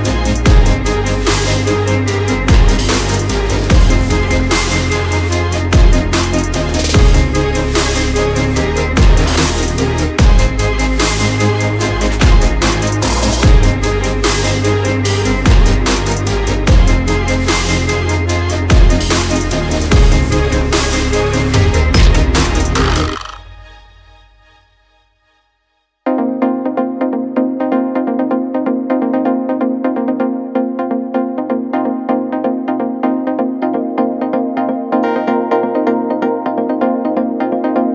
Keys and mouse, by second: 0.0-3.5 middle drag, 3.6-3.9 shift+middle drag, 4.2 middle drag, 4.8 click, 5.4 click, 8.4 ctrl+a, 10.5 shift+click, 11.7 middle click, 13.9 ctrl+j, 14.7-17.9 middle drag, 24.1 Tab, 24.9 3, 25.8 middle click, 27.4 click, 28.3 l, 34.8 l, 36.2 shift+click, 37.1 l.